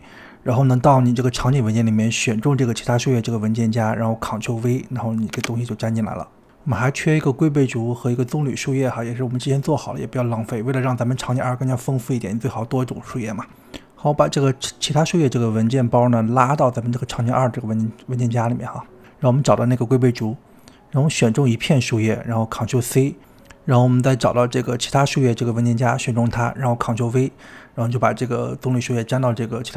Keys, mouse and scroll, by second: 4.9 click, 5.7 ctrl+v, 6.9-8.9 shift+middle drag, 8.9 g, 13.9 click, 15.5 click, 15.8 click, 16.1 click, 16.5 click, 17.6 click, 18.3 click, 18.5 click, 19.7 click, 21.3 click, 22.0 click, 23.5 ctrl+c, 25.3 click, 26.2 click, 27.9 ctrl+v, 28.9 g, 29.6 middle drag.